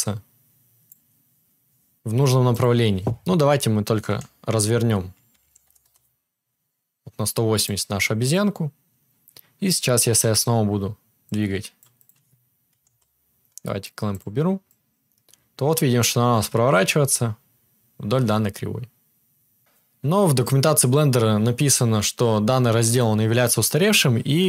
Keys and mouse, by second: 2.6-20.6 right drag, 4.0 r, 7.5 click, 11.4-14.2 drag, 14.8-20.6 drag.